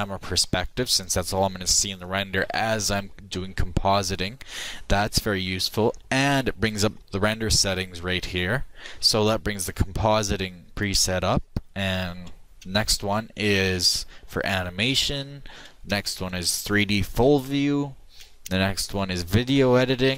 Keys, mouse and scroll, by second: 12.7 ctrl+Left, 16.0 ctrl+Left.